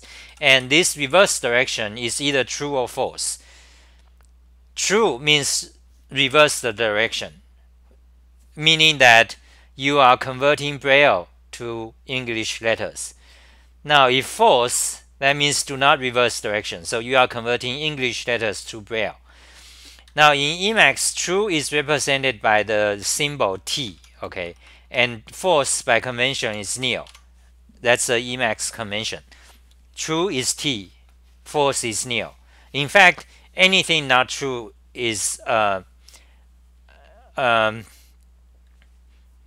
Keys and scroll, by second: 0.1 ctrl+g, 0.3-1.1 typing, 20.1 ctrl+g, 20.7 1, 22.5 Home, 23.1 ctrl+g, 23.1-24.3 typing, 24.5 Return, 24.7 Return, 24.9 Return, 25.4 Home, 25.6 c, 25.7 c, 26.5 u, 27.1 Home.